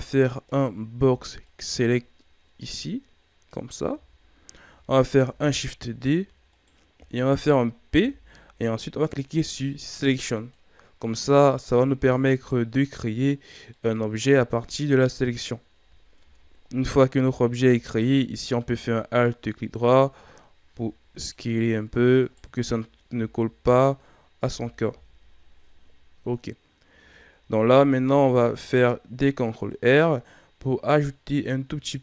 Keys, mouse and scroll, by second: 0.4 right click, 0.9 b, 3.8 z, 5.1 shift+d, 7.9 p, 11.6 Tab, 12.3 right click, 13.7-15.7 middle drag, 15.7 KP_1, 16.1 Tab, 17.8 alt+right click, 19.1-20.6 middle drag, 20.6 s, 22.2 alt+right click, 23.1 s, 24.3 KP_1, 24.8 Tab, 25.4 scroll down 3, 26.3-26.9 scroll up 4, 26.9 Tab, 28.1 ctrl+r.